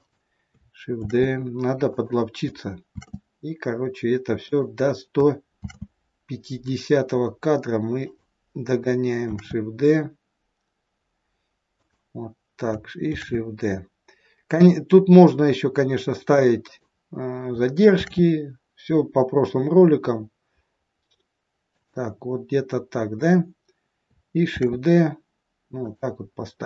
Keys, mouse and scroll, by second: 1.0 shift+d, 3.0 shift+d, 5.5 shift+d, 9.2 shift+d, 13.1 shift+d, 18.0 shift+d, 24.4 shift+d.